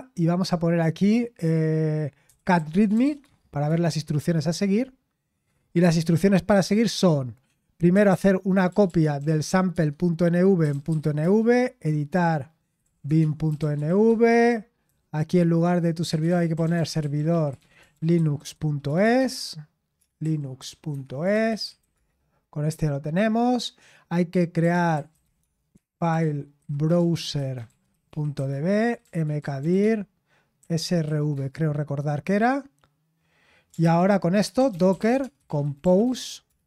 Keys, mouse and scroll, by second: 2.6-3.6 typing, 9.4-11.4 typing, 12.5-22.0 typing, 24.3-31.8 typing, 33.4-36.6 typing.